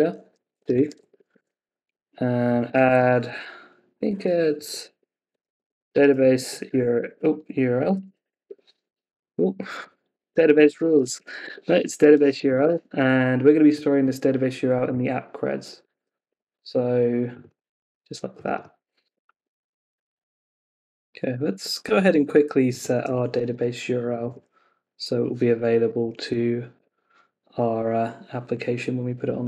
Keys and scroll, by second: 0.5 Escape, 4.5 Left, 8.4 Escape, 9.6 Left, 11.4 Escape, 12.6 Escape, 14.9 super+c, 16.2 super+v, 16.5 Escape, 17.6 super+c, 18.7 super+v, 23.4 super+Tab, 26.0 Up, 26.7 Return.